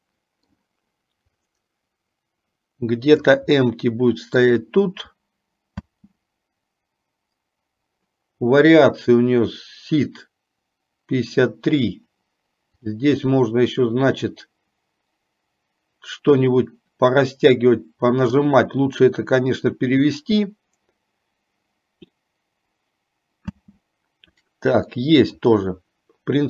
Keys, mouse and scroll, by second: 1.9-3.5 drag, 3.9-4.9 middle drag, 5.9 space, 13.1-18.6 drag, 23.9 space, 25.1 middle click.